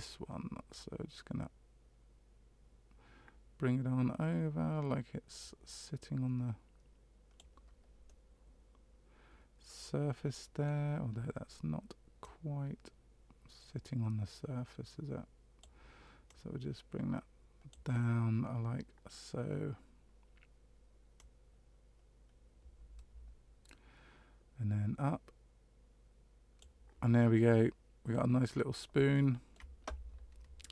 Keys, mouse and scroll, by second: 0.7 click, 8.0 middle click, 12.2 click, 16.2 click, 21.1 click, 27.3 middle click, 28.6 scroll down 2, 29.1 shift+middle click.